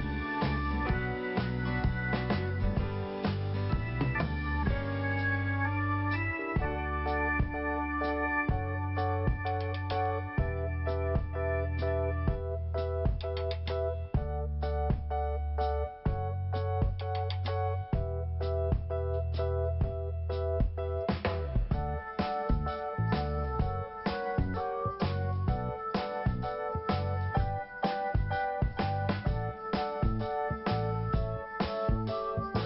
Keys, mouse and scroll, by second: 0.0 click, 0.8 click, 1.0 click, 1.5 scroll down 1, 4.6-4.9 scroll up 2, 6.1 p, 7.1 click, 13.8 click, 13.9 click, 14.4 click, 14.5 click, 15.9 click, 16.0 click, 16.8 Delete, 18.0 scroll up 1, 19.5 click, 21.6-22.0 scroll down 2, 22.8 scroll down 1, 23.7 scroll down 1, 26.0 click, 26.1 click, 26.7 click, 26.8 click, 27.4 scroll up 1, 28.7 scroll down 1, 29.5 scroll up 1, 32.3 click.